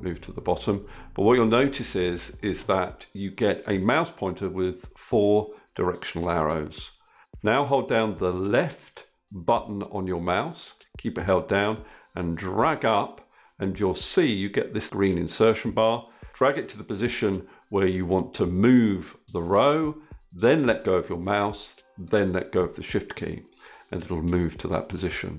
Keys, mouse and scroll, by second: 7.9-21.5 shift+drag.